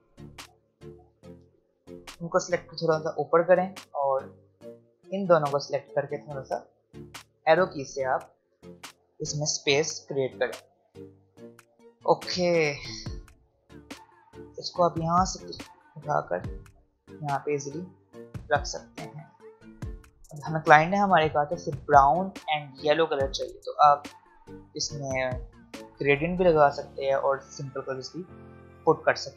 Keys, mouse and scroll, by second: 0.5-2.9 drag, 2.9 Up, 3.4-6.8 drag, 6.8 Left, 7.9 click, 10.5-11.6 alt+scroll down 1, 12.4-12.9 alt+scroll up 1, 14.0-18.4 drag, 19.3-19.8 alt+scroll up 1, 19.8-20.1 alt+scroll down 1.